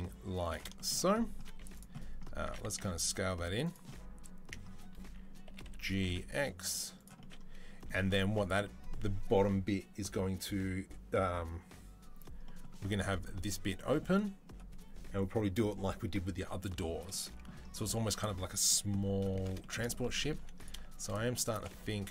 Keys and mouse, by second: 1.3 z, 2.3 s, 5.3 g, 20.2 3, 20.4 right click, 20.4 shift+middle click, 20.7 shift+click, 20.8-22.1 shift+middle drag.